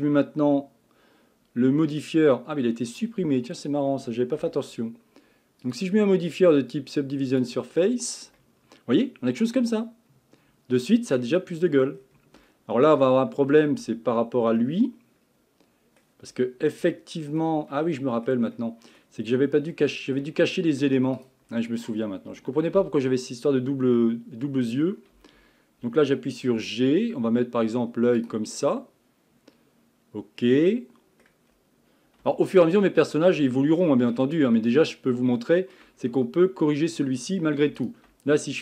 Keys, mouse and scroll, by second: 1.7-3.0 scroll up 5, 3.0 scroll down 3, 3.3 scroll up 4, 4.4 Tab, 5.6-8.4 drag, 8.4-11.4 middle drag, 11.5-12.0 scroll up 5, 12.0-12.5 scroll down 4, 12.5-13.8 shift+middle drag, 13.8 Tab, 14.6-16.3 middle drag, 16.3-16.9 scroll up 2, 16.9-19.1 shift+middle drag, 19.1 scroll down 1, 19.2 scroll up 4, 19.7-21.2 middle drag, 21.2 click, 22.8 l, 25.1 KP_1, 26.5 g, 28.7-31.6 middle drag, 31.6-32.3 scroll down 1, 32.3 shift+middle click, 33.0-33.5 scroll up 5, 33.5 shift+middle click, 34.1-35.4 scroll down 11, 35.4 shift+middle click, 36.0-37.8 scroll up 2, 37.8 alt+click.